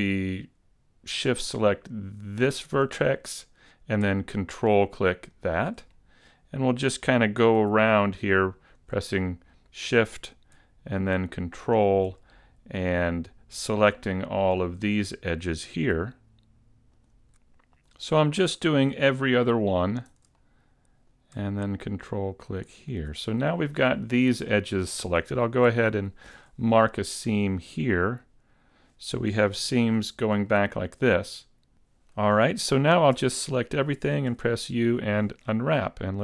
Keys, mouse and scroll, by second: 2.6 shift+right click, 5.4 ctrl+right click, 5.9 middle click, 8.6 shift+right click, 9.5 middle click, 11.7 ctrl+right click, 12.2 middle click, 14.4 shift+right click, 14.9 middle click, 17.0 ctrl+right click, 20.0 shift+right click, 20.4 middle click, 22.6 ctrl+right click, 23.2 middle click, 26.5 ctrl+e, 29.6 a, 30.5 middle click, 31.3 scroll up 4, 33.2 a, 35.2 a.